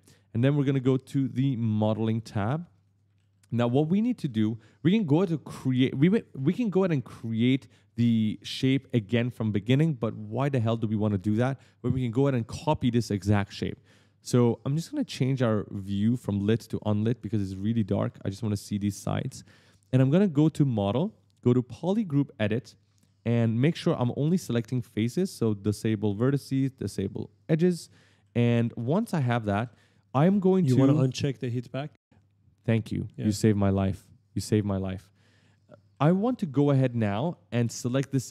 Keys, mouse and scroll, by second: 0.8 click, 1.9 click, 2.4-4.5 typing, 2.6 right click, 2.8 right click, 3.1 right click, 3.5 right click, 3.8 right click, 4.1 right click, 16.1 click, 16.9 click, 17.4-19.0 typing, 17.6 right click, 17.9 right click, 18.9 right click, 20.4 click, 21.7 click, 22.7 right click, 22.8 d, 22.9 right click, 25.8 click, 27.2 click, 27.4-30.0 typing, 27.8 right click, 28.0 right click, 28.4 right click, 28.8 right click, 34.0 click, 34.9 right click, 35.0-37.4 typing, 35.7 right click, 36.3 right click, 36.5 right click, 36.9 right click.